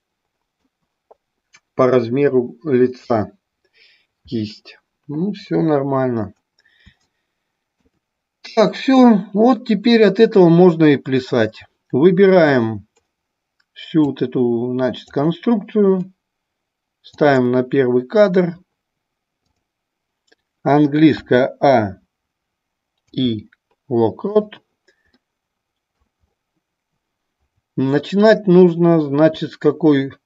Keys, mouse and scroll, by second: 7.2 middle click, 14.3-15.2 drag, 17.2 click, 19.6 click, 25.3 middle click.